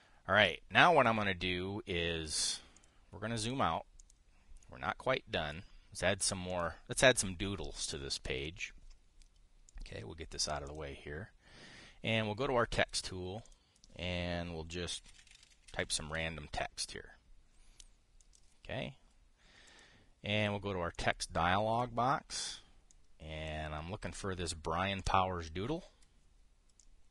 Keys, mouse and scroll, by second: 3.4 click, 4.1 click, 4.7 click, 5.3 click, 6.9 click, 7.2 click, 10.4 click, 11.4 click, 13.5 click, 14.1 click, 15.4-17.5 typing, 18.9 click, 20.4 click, 21.6 click, 23.6-24.3 drag, 25.7 click.